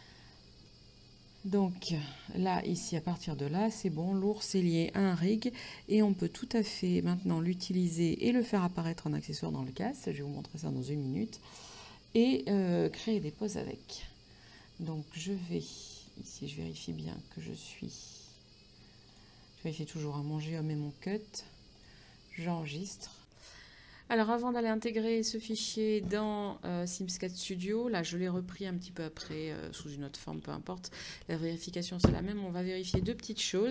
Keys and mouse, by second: 23.5 click, 26.3 middle click.